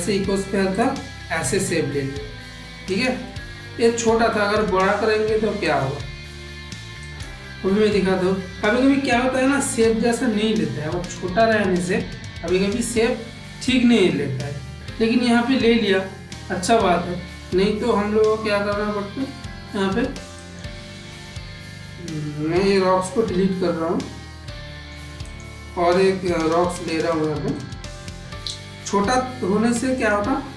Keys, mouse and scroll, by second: 0.8 click, 2.9 click, 3.1-4.5 middle drag, 6.9 click, 7.8-11.8 middle drag, 12.1 Tab, 13.1-17.4 middle drag, 20.4 click, 23.2 Delete, 24.0-24.8 middle drag, 25.2 click, 26.1 shift+d, 29.2 g.